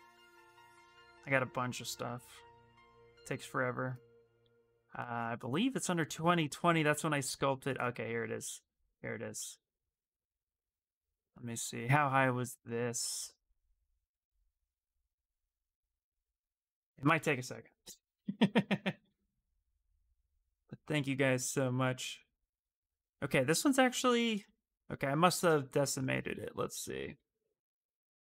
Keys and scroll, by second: 26.9 t, 27.3 f.